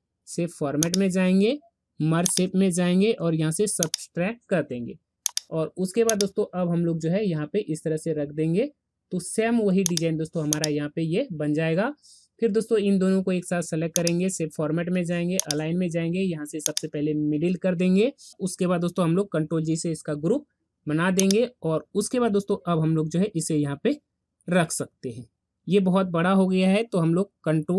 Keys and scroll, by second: 19.8 ctrl+g.